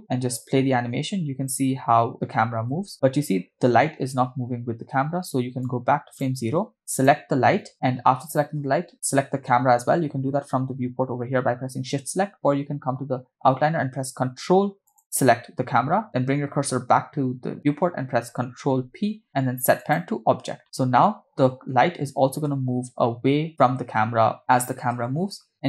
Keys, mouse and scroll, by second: 0.1 space, 2.9 space, 5.8 click, 6.9 click, 14.9 ctrl+click, 18.9 ctrl+p, 20.8 space, 22.6 space, 24.3 space, 25.2 space.